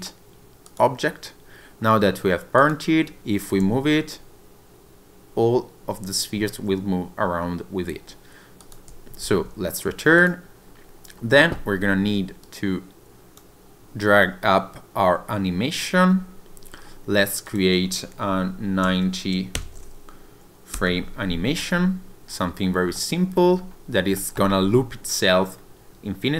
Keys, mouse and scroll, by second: 2.6 click, 3.7 g, 8.7 click, 9.3 ctrl+z, 10.2 click, 10.8-11.2 scroll up 2, 11.2-11.6 scroll down 1, 12.5 click, 17.5 click, 22.5-22.9 scroll down 2, 23.0 shift+middle click, 23.6 scroll up 1, 24.2 shift+middle click.